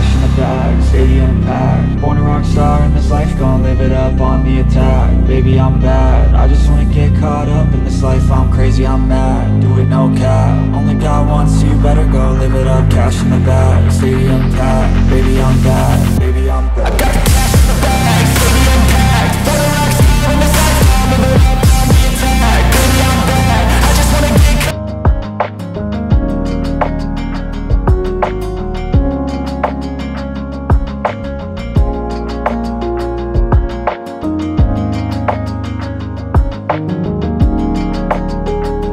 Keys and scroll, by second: 1.6 Tab, 3.8 Tab, 8.8 space, 19.7 space, 27.4 s, 36.0 space.